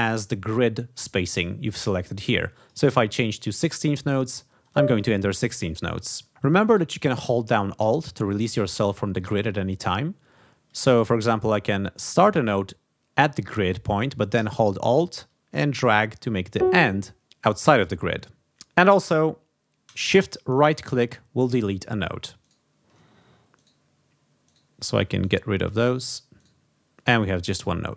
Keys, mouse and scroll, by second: 2.5 click, 3.3 click, 4.6 click, 5.9 click, 12.0-16.7 drag, 20.6 shift+right click, 22.4 shift+right click, 23.5-23.8 shift+scroll up 1, 24.4-24.7 shift+scroll up 1, 25.2-25.5 shift+scroll up 1, 26.3 shift+scroll up 1.